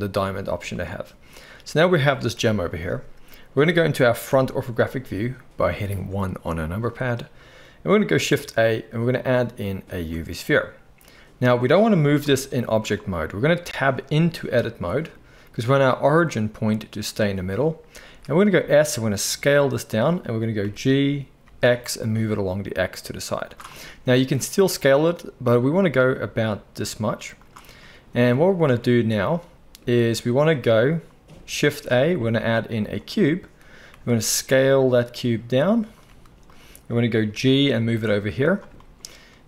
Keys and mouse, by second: 2.3 KP_1, 4.3 KP_1, 8.2 shift+a, 12.2 g, 13.6 Tab, 18.1 s, 20.0-39.4 middle drag, 20.6 g, 24.1 s, 31.6 shift+a, 33.9 s, 36.1 z, 37.3 g.